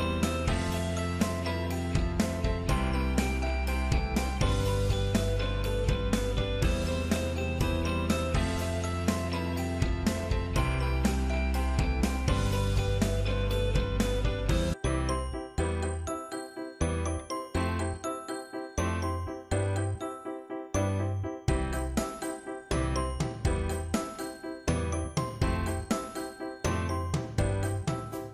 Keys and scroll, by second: 19.2 ctrl+c, 27.0 ctrl+v.